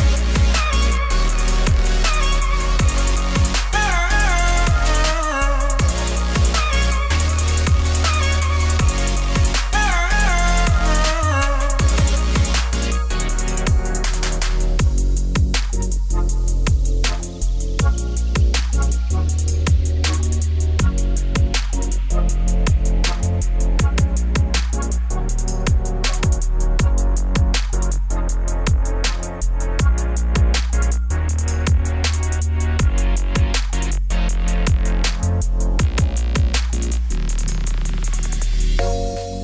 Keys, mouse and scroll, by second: 1.5 Tab, 1.7 s, 2.3 Tab, 2.6 KP_7, 2.8 g, 4.6 Tab, 4.7 s, 5.9 Tab, 6.3 alt+d, 7.3 middle click, 7.9 click, 8.6-9.9 middle drag, 10.8 Tab, 11.1 middle click, 11.3 ctrl+r, 12.2 middle click, 12.4 ctrl+r, 13.3 middle click, 13.4 Tab, 14.5 ctrl+2, 15.4 right click, 15.7 Tab, 16.0 ctrl+r, 16.9 middle click, 17.1 ctrl+r, 18.2 ctrl+r, 19.2 middle click, 19.5 ctrl+r, 20.5 middle click, 20.7 Tab, 21.5-23.0 drag, 24.7 click, 25.5 Tab, 26.9 3, 27.4 click, 27.8 middle click, 28.2 g, 30.2 click, 30.3 middle click, 30.4 g, 31.0 Tab, 31.1-32.1 middle drag, 32.1 scroll down 1, 32.2 scroll up 1, 32.3 Tab, 32.6 2, 32.8 alt+click, 33.3 middle click, 33.6 ctrl+b, 34.9 click, 35.1 middle click, 35.3 ctrl+b, 36.2 1, 36.4 click, 36.5 g, 37.3 click, 37.4 g, 37.7 Tab, 37.8-39.0 middle drag, 39.0 ctrl+z, 39.1 ctrl+z.